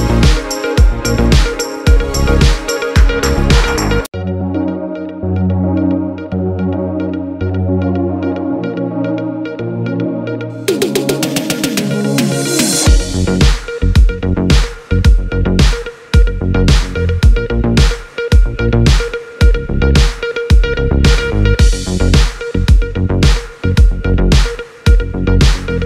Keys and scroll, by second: 20.1-22.7 typing, 22.9 Return.